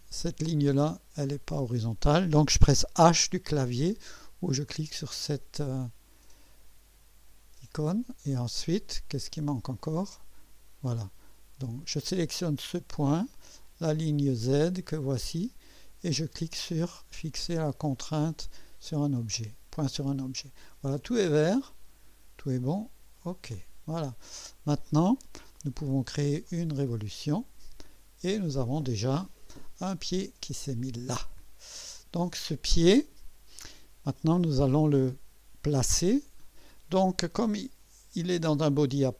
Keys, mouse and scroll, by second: 0.6 click, 1.6 click, 5.3 click, 5.3 h, 7.8 click, 9.8-11.6 drag, 12.0 click, 13.1 click, 15.1 click, 18.9 click, 20.1-20.6 scroll down 2, 21.2-22.1 right drag, 23.1 click, 24.0 scroll down 1, 24.5-25.2 right drag, 26.4 click, 28.0-28.8 scroll down 2, 28.8-29.1 scroll up 2, 30.8 click, 31.6 scroll down 2.